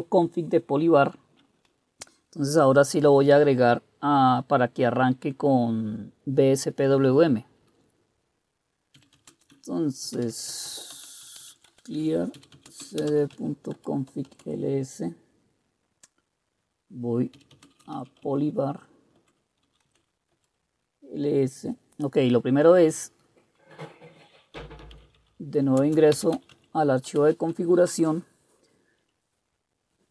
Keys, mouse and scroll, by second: 9.0-14.9 typing, 17.4-20.4 typing, 24.4-27.0 typing, 27.2 Return, 29.1 Down, 29.7-30.1 Down.